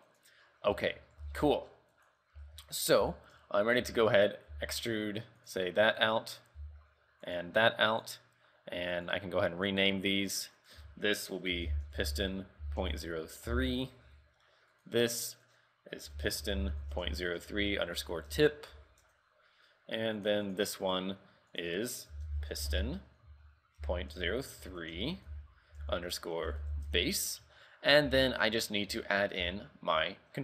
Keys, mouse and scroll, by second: 0.5 scroll down 3, 0.8 shift+middle click, 1.2 scroll up 3, 1.3 z, 1.6 shift+middle click, 2.0 right click, 2.5 z, 2.8 shift+middle click, 3.1 z, 3.5 Tab, 3.9 a, 4.2 right click, 4.6 e, 6.1 right click, 6.7 e, 8.0 right click, 9.0 right click, 9.8 click, 10.7 click, 14.8 right click, 15.5 click, 20.3 right click, 20.9 right click, 21.6 click, 27.9 scroll down 3, 28.2 z, 28.4 shift+middle click, 28.7-29.1 scroll up 3, 29.1 shift+middle click, 29.5 z, 29.8-30.1 scroll down 2, 30.3 shift+middle click.